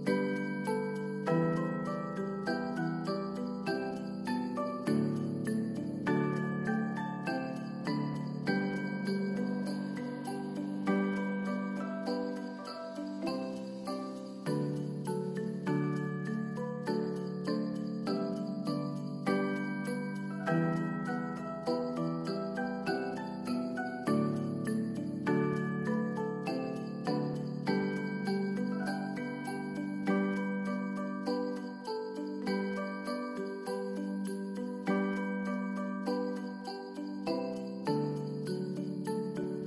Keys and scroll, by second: 14.9 ctrl+s, 21.1 v, 24.7 space, 26.5 space, 27.1 s, 38.9 u.